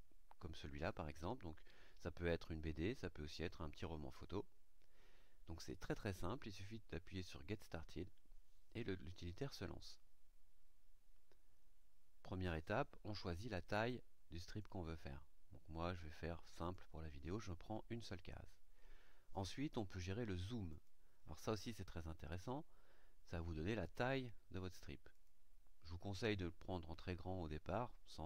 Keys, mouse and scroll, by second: 4.7-7.5 scroll up 2, 7.5 click, 14.4 click, 16.5 click, 20.7 click, 23.8 click, 25.1 click.